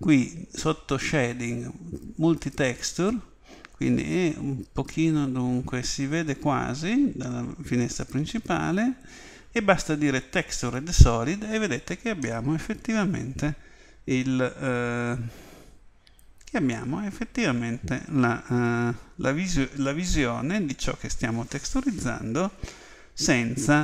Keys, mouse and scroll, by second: 3.3-7.0 scroll up 1, 7.0-9.6 scroll up 1, 9.6-10.0 scroll up 1, 10.6 click, 12.2-14.1 middle drag.